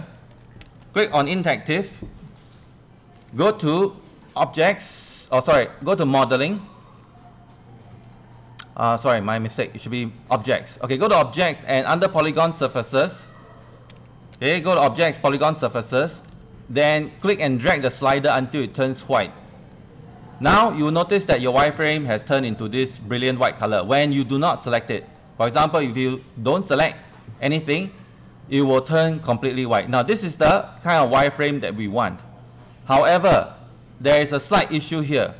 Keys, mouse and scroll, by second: 0.8 ctrl+c, 1.5 Escape, 2.3-6.8 drag, 14.4 ctrl+1, 14.8 click, 15.5 ctrl+click, 16.3 Escape, 17.8-19.8 drag, 25.3 click.